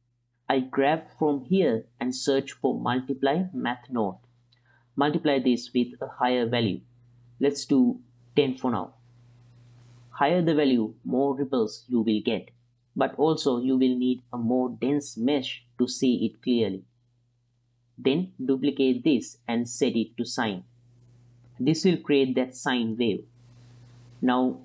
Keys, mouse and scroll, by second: 0.4 shift+space, 0.9-4.9 drag, 3.0 BackSpace, 5.1 ctrl+shift+click, 5.7 click, 7.2-8.7 drag, 10.3-11.8 drag, 14.1 click, 17.5 shift+d, 18.3 click, 19.5-21.2 drag, 21.9 click, 23.8-24.2 middle drag.